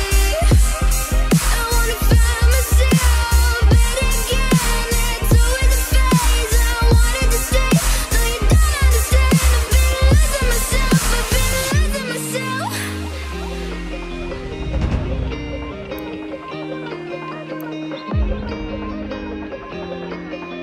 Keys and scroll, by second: 11.2 ctrl+j, 14.9 ctrl+t.